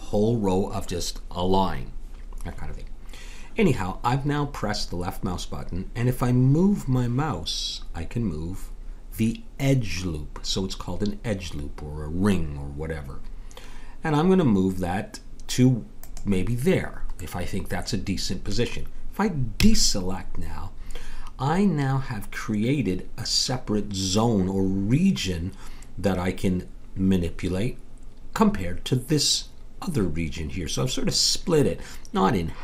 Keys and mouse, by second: 17.2-19.4 middle drag, 19.6 a.